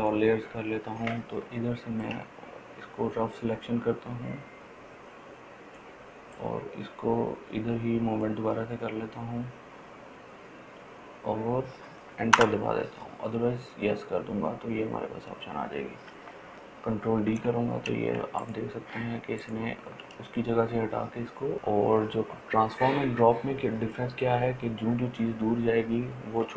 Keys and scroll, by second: 12.7 Return, 17.5 ctrl+d.